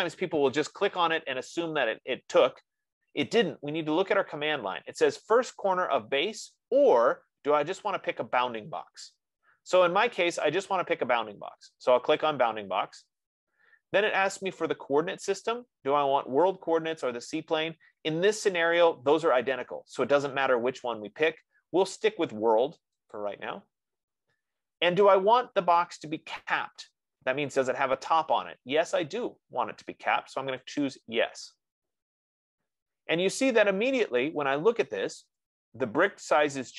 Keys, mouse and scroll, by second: 2.8 F15, 12.7-17.7 drag, 23.6-28.6 drag, 31.1-35.7 drag.